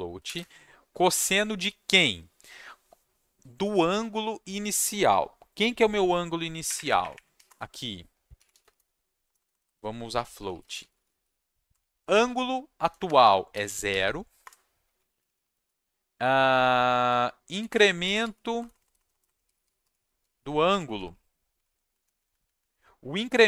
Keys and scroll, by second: 0.2 shift+9, 0.3 space, 6.6 Escape, 6.7 Up, 6.9 Up, 7.0 Up, 7.1 Up, 7.4 Return, 8.1-16.0 typing, 14.4 Return, 17.3-21.6 typing, 21.7 Right, 21.9 Right, 22.0 Right, 22.1 Right, 22.3 Right, 22.4 Right, 22.5 Right, 23.3-23.4 typing.